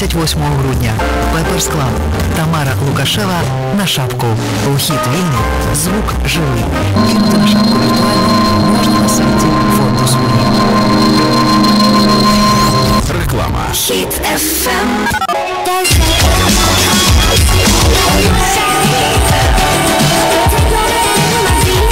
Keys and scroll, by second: 13.1 Page_Down.